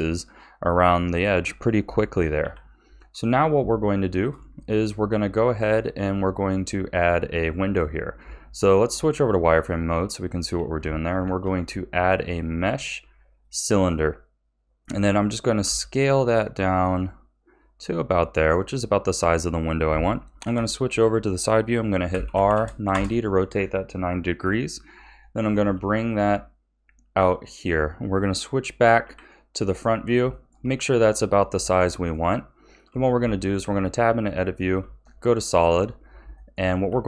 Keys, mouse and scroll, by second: 2.4 KP_1, 3.0-3.7 scroll down 2, 3.7-4.5 shift+middle drag, 4.5-7.5 scroll up 2, 7.5-8.6 scroll down 2, 8.6 z, 9.7-10.2 scroll up 2, 10.2-11.2 shift+middle drag, 11.2 shift+a, 15.6 s, 20.4 KP_3, 22.1 r, 25.5 g, 29.0 KP_1, 30.3-32.9 shift+middle drag, 32.9 Tab, 34.0 z, 35.5-36.3 scroll up 5, 36.3 shift+middle click, 36.8 a.